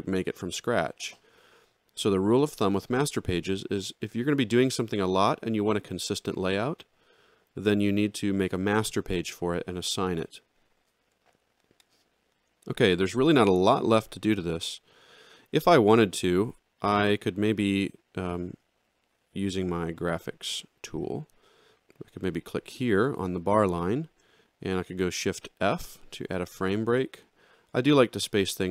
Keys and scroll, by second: 25.1 shift+f.